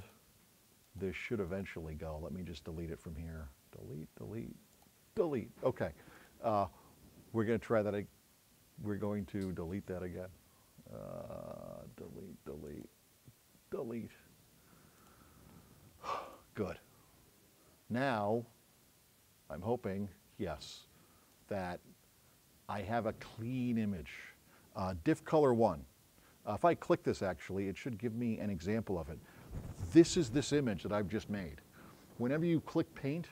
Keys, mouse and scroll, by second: 0.1 click, 0.9 click, 1.6 right click, 9.1 right click, 12.7 click, 15.0 click, 21.4-24.2 drag, 27.0 click.